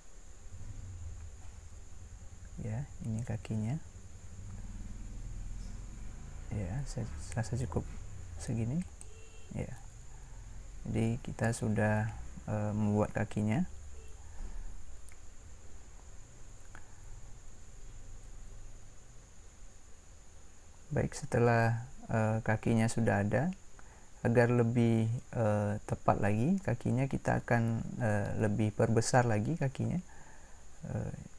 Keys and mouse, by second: 10.5-21.9 middle drag.